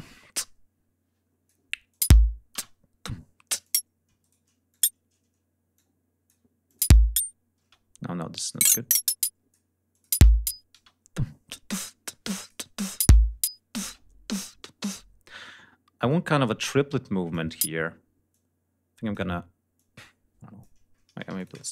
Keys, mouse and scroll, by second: 0.2-1.6 drag, 1.8 click, 2.0 space, 3.5 click, 4.1 shift+right click, 4.6 shift+click, 5.6 alt+click, 6.6 alt+click, 6.7 alt+space, 7.5 space, 8.4-9.6 drag, 9.8 click, 10.1 space, 10.8 space, 11.7 click, 12.8 click, 12.9 space, 13.7 space, 16.0-17.4 drag, 17.5 ctrl+y, 18.2 click, 19.7 click, 21.2 shift+g, 21.3-21.7 shift+drag, 21.5 shift+middle click.